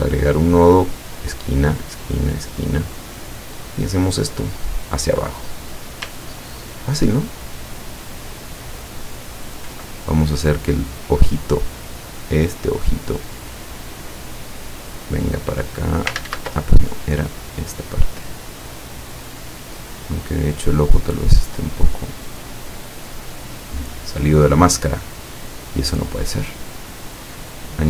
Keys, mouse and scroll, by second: 1.4 click, 3.1-5.9 drag, 6.4 ctrl+scroll down 1, 6.9 ctrl+scroll down 1, 7.5 ctrl+middle click, 8.7 ctrl+scroll up 1, 9.2 ctrl+click, 10.4 click, 11.6 click, 14.3-16.2 drag, 16.3 ctrl+z, 16.7 ctrl+click, 17.7-19.2 drag, 20.3 click, 21.3-24.3 drag, 25.0 click, 25.9-27.1 drag.